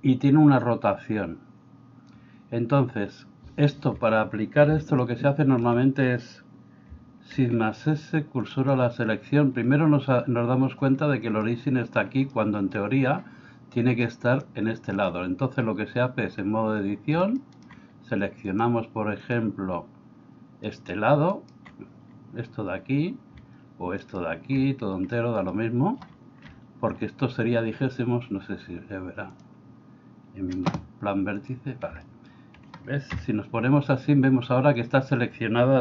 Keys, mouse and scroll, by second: 5.0-5.7 shift+middle drag, 7.3 shift+s, 11.5-12.0 middle drag, 12.4 middle click, 14.4-15.6 drag, 19.2 click, 25.2 middle click, 26.4 KP_1, 31.5 click, 32.0 middle click, 33.2 KP_1.